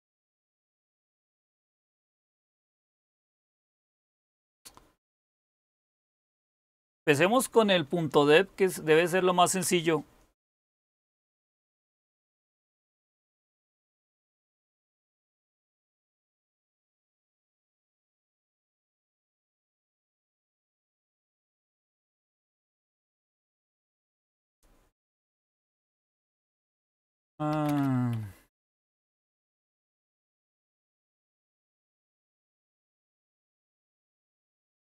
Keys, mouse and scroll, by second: 7.1-8.2 scroll up 1, 8.2-9.7 scroll up 1, 9.7-12.8 scroll up 1, 12.8-13.7 scroll up 1, 13.7 super+k, 15.9-21.9 typing, 18.1 Return, 22.1 Return, 26.9-31.8 typing, 33.3 typing.